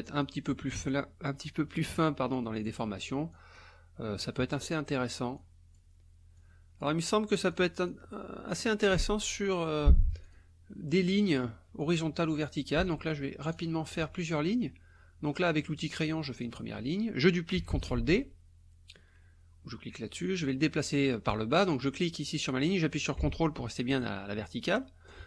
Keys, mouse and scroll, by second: 0.9 click, 2.4 click, 3.3 click, 4.2 click, 5.4 click, 6.4 click, 7.5 click, 8.4 click, 10.3 click, 10.7 click, 11.8 click, 13.5 ctrl+click, 16.4 click, 17.7 ctrl+d, 21.8-25.2 drag.